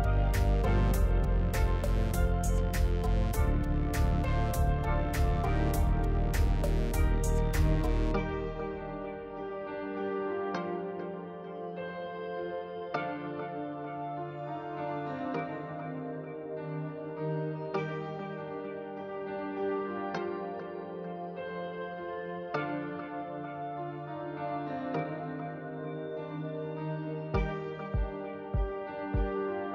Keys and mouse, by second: 1.0 ctrl+b, 4.6 click, 9.8 ctrl+b, 12.2 Tab, 12.6 click, 15.5 KP_3, 16.9 click, 17.6 alt+z, 18.0 click, 18.5 alt+z, 18.8 Tab, 19.5 Tab, 19.8-20.8 drag, 21.3 KP_3, 22.2 alt+z, 23.4 click, 24.0 Tab, 25.4 KP_3, 27.3 alt+click, 28.1-29.4 middle drag.